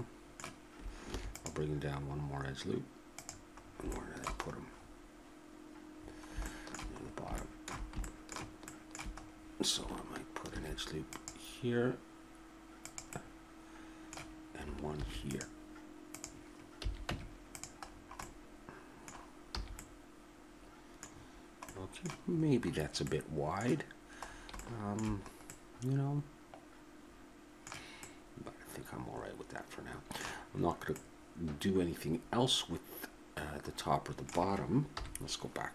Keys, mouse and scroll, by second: 1.1 ctrl+r, 3.7 middle click, 4.9-8.3 middle drag, 10.5 ctrl+r, 13.2 middle click, 15.0 ctrl+r, 16.8 a, 17.1 Tab, 17.9 middle click, 19.6 a, 28.4-29.9 middle drag, 31.0-33.7 middle drag, 34.9 KP_1.